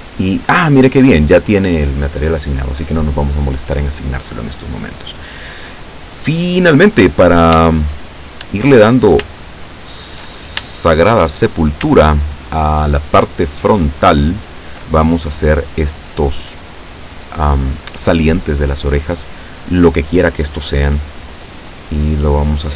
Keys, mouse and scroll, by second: 7.3-7.6 scroll down 1, 7.8 shift+middle click, 9.1-9.4 shift+scroll down 2, 9.5 shift+middle click, 10.8 shift+middle click, 11.5-11.9 shift+scroll up 1, 12.1 shift+middle click, 12.8 shift+middle click, 13.5 shift+middle click, 14.0 shift+scroll up 1, 14.3 shift+middle click, 15.0-15.9 shift+scroll up 1, 15.9-19.9 scroll up 1, 21.1-22.7 middle drag.